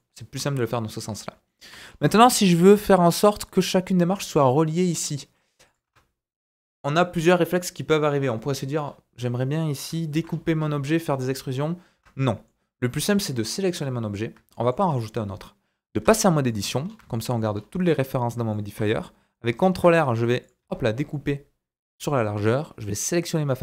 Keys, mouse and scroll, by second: 1.1-1.8 shift+drag, 1.1 scroll down 1, 1.8-5.6 middle drag, 1.8 scroll up 2, 3.0-3.3 scroll up 2, 5.2-5.6 scroll down 1, 5.6 click, 5.7 middle click, 5.8 Tab, 8.8-9.3 scroll up 2, 9.3-9.9 scroll down 2, 10.1 ctrl+r, 11.9 Tab, 12.3 middle click, 13.1 click, 14.3-14.7 shift+drag, 14.5 shift+middle click, 14.7-18.3 right drag, 16.0 Tab, 16.2 middle click, 16.5-16.9 scroll up 3, 17.1 shift+middle click, 17.5-18.1 scroll up 3, 18.1 middle click, 19.7 ctrl+r, 22.9-23.6 drag.